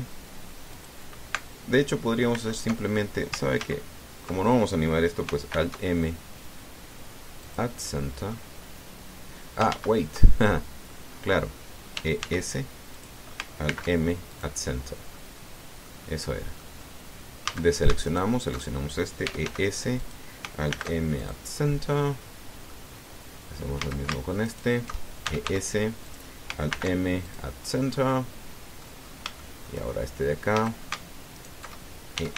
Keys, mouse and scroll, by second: 0.2 e, 0.4 s, 1.5 click, 3.1 alt+m, 4.4 ctrl+z, 6.3 alt+m, 8.2 click, 8.7-9.0 scroll down 2, 9.1-10.5 middle drag, 10.5 ctrl+z, 11.0 ctrl+middle click, 11.1 ctrl+click, 12.7 e, 13.0 s, 13.8 click, 14.5 alt+m, 15.1 click, 15.6 scroll down 2, 15.9 click, 17.1 click, 17.5-17.8 scroll up 2, 18.2 a, 18.9 alt+shift+right click, 20.0 e, 20.2 s, 20.8 click, 21.5 alt+m, 22.0 alt+click, 22.5 alt+scroll down 3, 22.8 click, 23.7 middle click, 24.0 click, 24.6 a, 25.3 alt+shift+right click, 26.0 alt+shift+e, 26.2 alt+shift+s, 26.8 click, 27.5 alt+m, 28.1 alt+click, 28.4 alt+scroll down 3, 28.7-29.8 drag, 29.8 scroll up 3, 30.2 shift+click, 31.3 a, 32.2 alt+shift+right click.